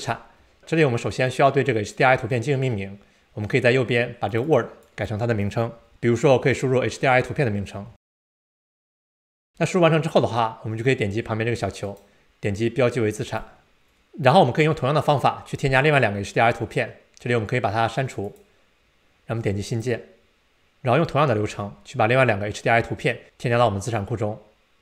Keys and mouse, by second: 4.3-9.5 drag, 9.0 BackSpace, 11.8-13.4 right drag, 18.6-19.8 drag.